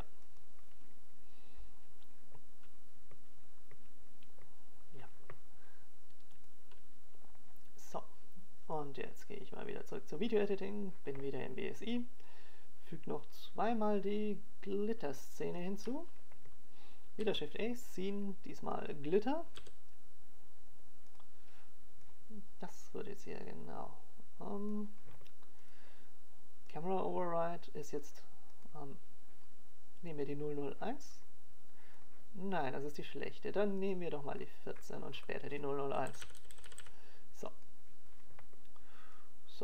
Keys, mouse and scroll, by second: 2.9 right click, 3.8 g, 7.3 click, 13.3 click.